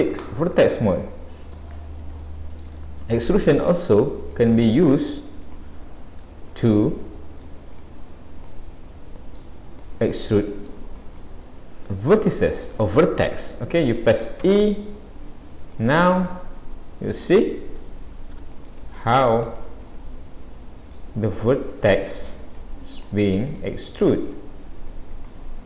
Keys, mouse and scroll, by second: 0.8 middle click, 2.2 shift+middle click, 3.3-3.9 scroll up 1, 4.3 click, 5.5 shift+click, 7.7 click, 8.5 middle click, 9.8 middle click, 19.9 middle click, 21.7 click, 23.0 shift+click, 24.7 click, 25.1 shift+click, 25.4 middle click.